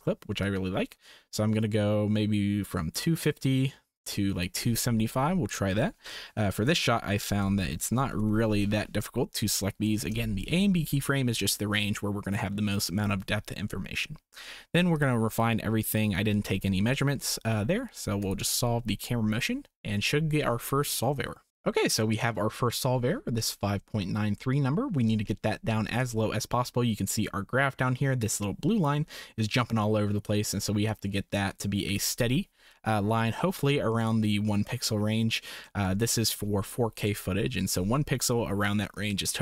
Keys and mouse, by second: 0.4-4.4 drag, 5.5-10.1 drag, 14.9 click, 15.3 click, 15.9 click, 18.2-21.5 drag, 21.5 ctrl+s, 25.5 shift+middle click, 28.2 click, 31.5 click, 34.1 click, 34.9 click, 35.8 shift+click.